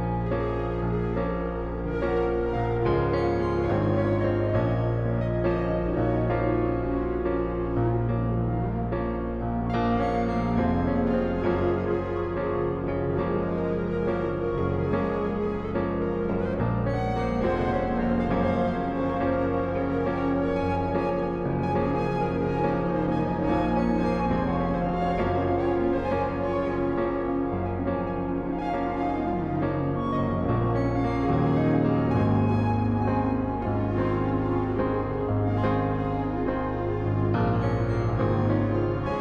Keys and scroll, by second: 2.9 ctrl+z, 6.5 v, 16.4-16.7 typing, 32.6 space.